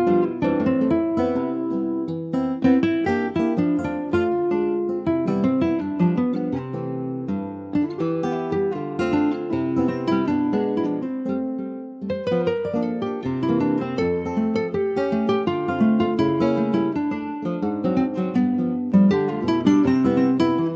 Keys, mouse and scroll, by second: 0.9 click, 2.4 click, 3.3-5.2 drag, 5.5 click, 5.8 ctrl+s, 6.0 middle click, 6.4 scroll up 1, 6.7 click, 7.0 Tab, 7.3 scroll up 2, 7.5 shift+middle click, 8.5 2, 8.7 click, 9.6 click, 10.2 alt+shift+click, 10.9 alt+shift+click, 11.9 ctrl+b, 17.9 Tab, 18.0 click, 18.4 scroll down 1, 18.4 middle click, 19.1 ctrl+s, 19.4-20.6 middle drag, 20.6 ctrl+z.